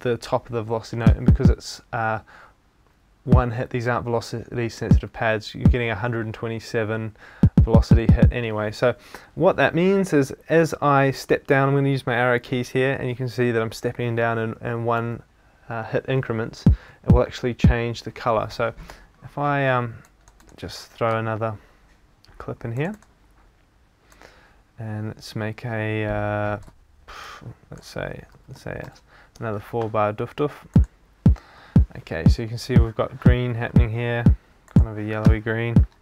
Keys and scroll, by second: 10.6 Down, 11.3 Up, 14.5 Down, 15.0 Up, 16.9 Down, 28.3 super+d.